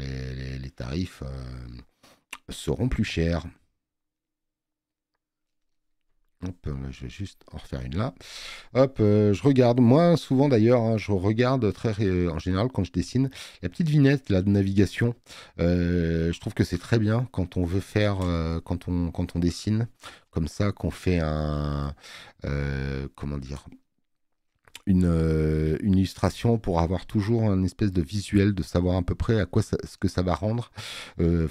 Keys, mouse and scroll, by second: 6.5 click.